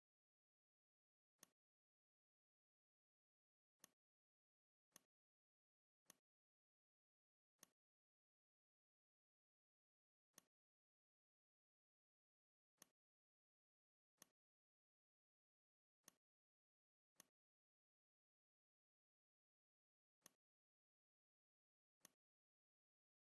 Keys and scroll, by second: 9.1 r, 11.8 v, 20.0 r, 21.4 v.